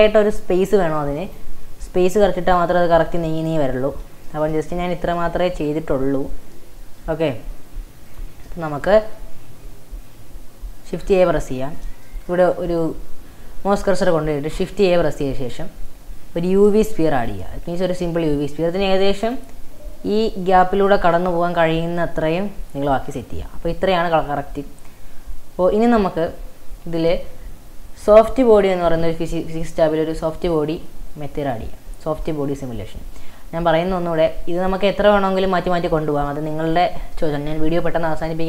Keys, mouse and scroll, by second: 1.3 drag, 1.9 g, 3.1 g, 4.3-8.1 shift+middle drag, 8.1 click, 8.5-11.0 shift+middle drag, 11.0 shift+right click, 12.1-14.5 shift+middle drag, 14.5 shift+a, 18.0 s, 20.2 g, 24.5-25.5 scroll up 2, 31.4-32.3 drag, 32.3-33.4 middle drag, 33.4 scroll down 5, 34.6 click, 36.1 scroll down 2, 36.3 shift+middle click, 36.8-38.3 scroll up 5, 38.3 scroll up 1.